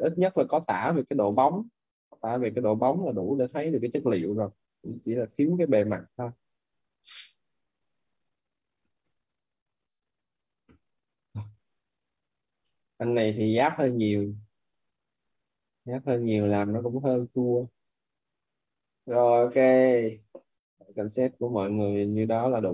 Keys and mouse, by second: 1.1 middle click, 8.1 click, 12.5 middle click, 16.4 click.